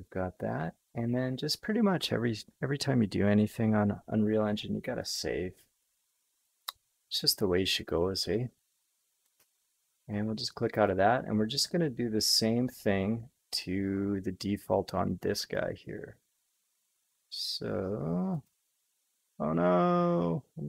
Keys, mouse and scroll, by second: 5.0-10.1 drag, 10.8-15.9 drag, 18.3-20.6 drag.